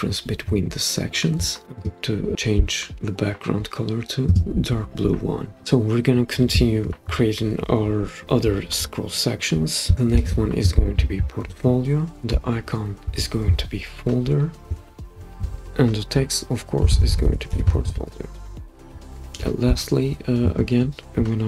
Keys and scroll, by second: 10.1 super+d, 14.7 Return, 14.7 typing, 16.6-19.4 typing.